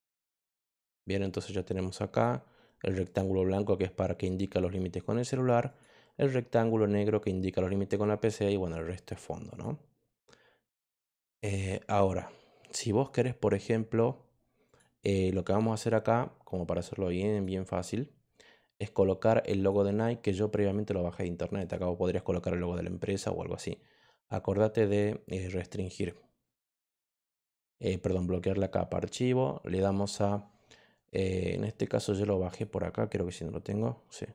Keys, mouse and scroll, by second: 2.0 click, 3.0 click, 5.6 click, 9.4 click, 14.6 click, 17.3 click, 19.5 click, 24.8 click, 27.3 click, 32.4 click.